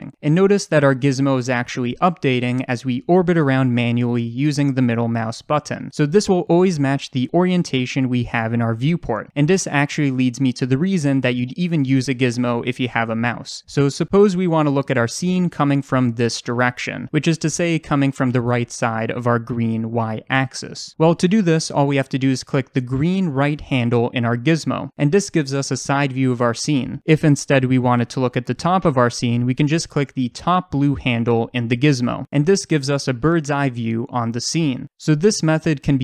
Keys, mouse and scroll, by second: 2.2-14.2 middle drag, 12.6-14.0 scroll down 2, 14.0 d, 14.2-21.8 drag, 15.0 d, 21.3 d, 21.8-23.7 right drag, 22.6 d, 23.7 click, 26.7-27.6 middle drag, 27.4 d, 27.6-29.4 drag, 28.0 d, 28.6 d, 29.4-31.3 right drag, 30.1 d, 31.3 click, 35.0-36.0 middle drag.